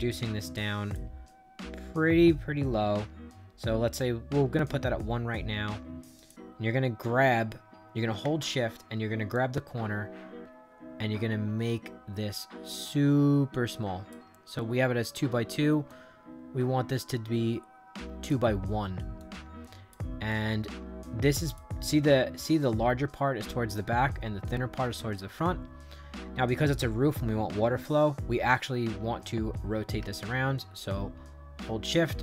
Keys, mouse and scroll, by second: 1.2 middle click, 1.7 middle click, 6.1 click, 9.2-14.0 shift+drag, 14.5 middle click, 14.9 middle click, 15.8-18.2 drag, 19.1 click, 20.2-21.5 drag, 21.9 middle click, 30.1-31.7 shift+drag.